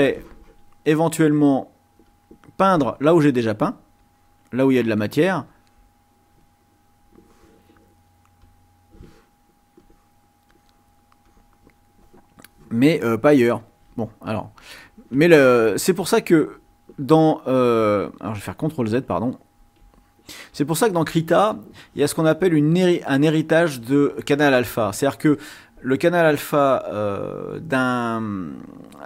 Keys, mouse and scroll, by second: 2.0 click, 4.0 click, 5.4 click, 8.5 click, 9.8-11.7 drag, 13.8 ctrl+z, 15.9 ctrl+z, 18.9 ctrl+z, 19.7 ctrl+z, 26.7 click, 27.3 click.